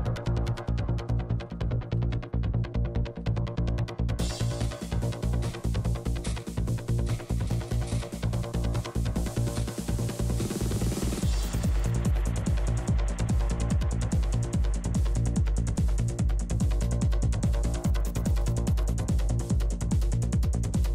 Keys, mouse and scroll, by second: 0.2-1.4 middle drag, 1.2 f, 1.4-3.3 drag, 2.0 f, 3.3 f, 3.7-5.3 drag, 7.5 click, 8.7-10.9 drag, 9.9 right click, 10.9 f, 11.2 f, 11.8-13.4 drag, 11.8 right click, 12.8 right click, 13.4 f, 13.7-14.9 drag, 13.7-14.9 middle drag, 13.7-14.9 right drag, 15.1-20.3 drag, 15.1-17.0 middle drag, 15.1-17.0 right drag, 18.6 f, 20.3 f, 20.5 f, 20.7 middle click.